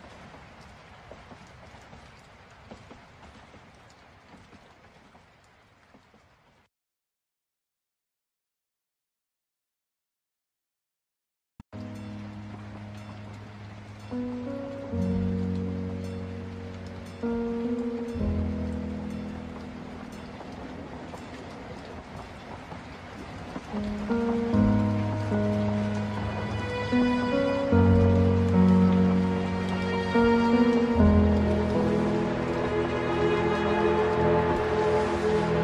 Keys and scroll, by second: 4.8 ctrl+z, 12.2 ctrl+alt+space, 25.7 ctrl+alt+space, 29.9 ctrl+space, 32.7 ctrl+z.